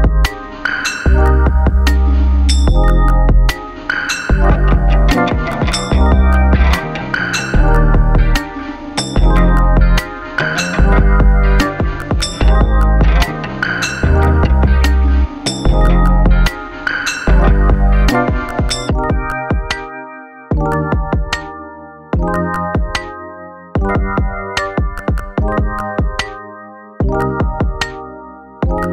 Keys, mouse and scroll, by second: 0.9 alt+scroll up 1, 3.5 click, 8.4 click, 13.6 right click, 15.5 click, 19.6 click, 19.7-25.5 alt+drag, 25.5-28.9 alt+drag.